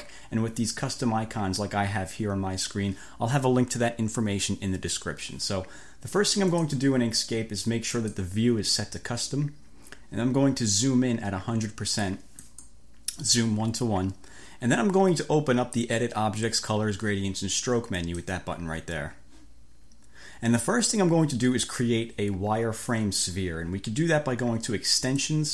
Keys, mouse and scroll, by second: 6.6 click, 8.0 click, 12.5 click, 18.0 click, 25.1 click.